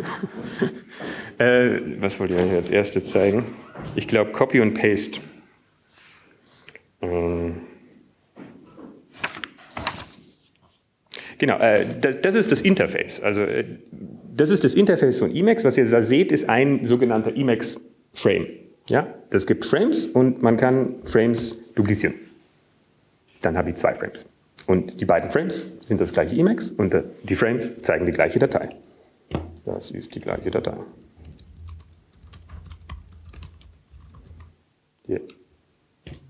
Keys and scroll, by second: 25.3 alt+2, 32.9-36.2 typing.